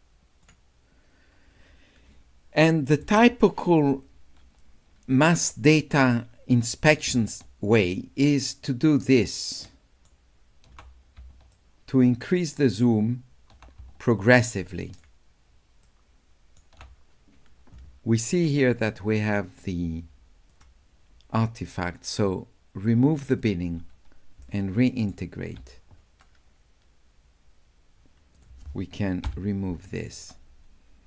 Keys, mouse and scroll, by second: 6.0 scroll down 2, 6.1 scroll up 2, 6.3 scroll down 2, 6.5 scroll up 2, 6.7 scroll down 2, 7.9-9.3 shift+drag, 9.3 shift+right click, 11.5 shift+right click, 11.8 shift+click, 14.1 shift+middle click, 15.9 shift+middle click, 19.6 click, 20.5 click, 23.3 click, 24.4 s, 24.5 right click, 28.4 click.